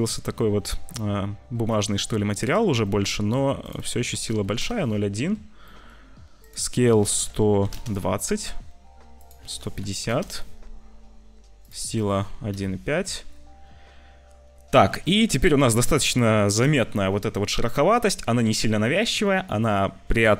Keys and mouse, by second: 0.4 click, 1.7 click, 2.8 click, 3.7 click, 5.6 click, 6.4-7.7 drag, 15.1 ctrl+s.